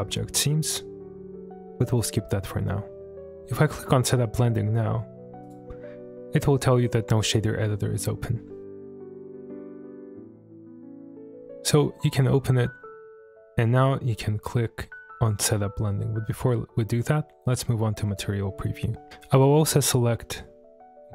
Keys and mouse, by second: 5.4 click, 9.4 click, 11.7-12.9 drag, 13.1 click, 19.4-21.1 drag.